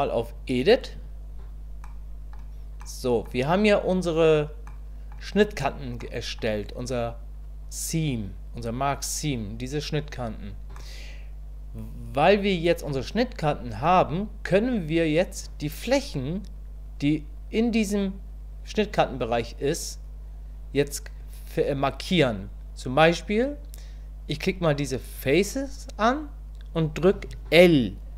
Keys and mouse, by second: 1.0 Tab, 1.8-3.2 middle drag, 4.7 middle click, 6.1 middle click, 10.8-13.8 middle drag, 25.1 click.